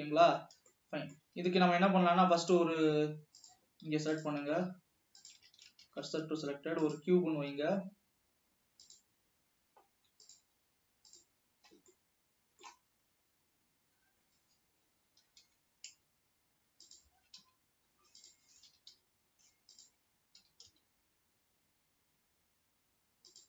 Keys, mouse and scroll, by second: 0.2 scroll up 2, 0.5 scroll down 1, 0.9-2.2 middle drag, 2.2 alt+a, 4.3 click, 4.7 shift+s, 5.8 alt+a, 7.8 s, 11.3 s, 11.7-12.0 scroll up 2, 12.5-13.7 shift+middle drag, 13.7 scroll up 1, 14.4 scroll down 1, 15.4 s, 17.3 s, 18.9 g, 20.5 g.